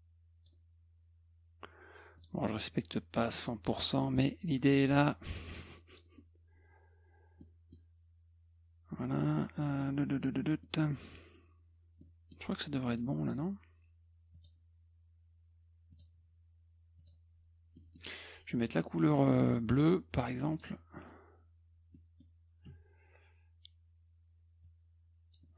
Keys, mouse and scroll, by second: 2.2 click, 3.3-4.7 drag, 5.6 click, 7.4 middle click, 8.0 middle click, 10.6 middle click, 12.0 middle click, 13.0 click, 14.3 click, 15.9 click, 17.0 click, 17.8 middle click, 20.5 click, 21.9 middle click, 21.9 scroll down 1, 22.7 F2, 24.6 click.